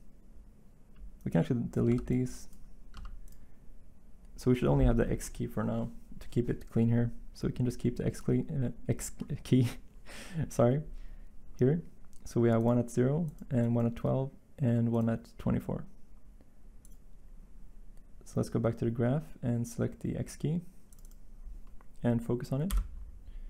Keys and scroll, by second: 1.8 b, 2.9 x, 22.7 Delete.